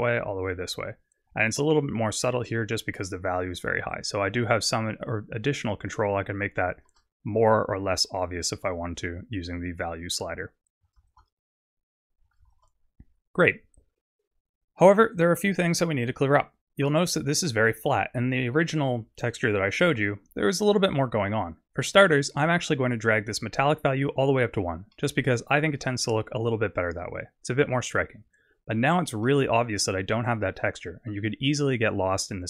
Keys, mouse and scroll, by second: 3.9 shift+click, 9.3 click, 11.0 ctrl+shift+click, 12.5 ctrl+shift+click, 16.9 middle click, 22.0 shift+middle click, 23.0 click, 25.0 middle click, 25.7-26.0 scroll down 2, 26.0 middle click, 29.3 middle click.